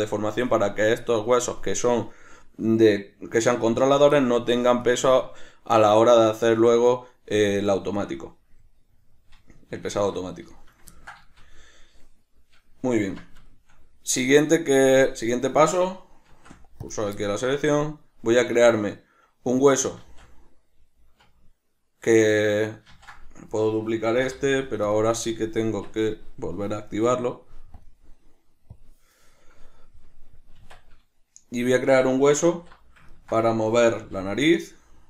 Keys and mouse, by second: 0.0 right click, 6.4-7.6 middle drag, 7.6 right click, 8.1-15.3 middle drag, 9.9 alt+q, 13.0 Tab, 15.3 right click, 16.3 shift+s, 17.2-23.4 shift+middle drag, 20.0 shift+a, 22.9 ctrl+z, 23.4 right click, 24.1 shift+d, 24.9 click, 25.7 Tab, 27.8 click, 28.7 drag, 30.6 Tab, 33.1-35.0 ctrl+middle drag, 34.0 g.